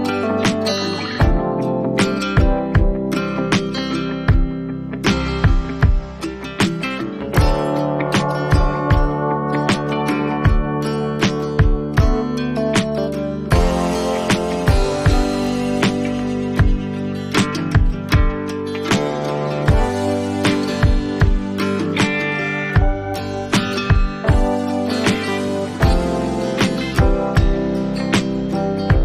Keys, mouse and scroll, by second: 15.9 click, 17.4 right click, 18.5 click, 21.3 click, 25.4 click, 27.8 click.